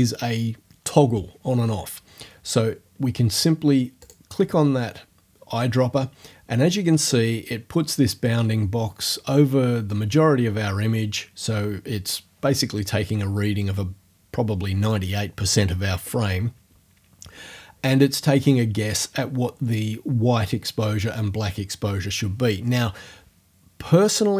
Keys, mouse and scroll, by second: 4.0 click.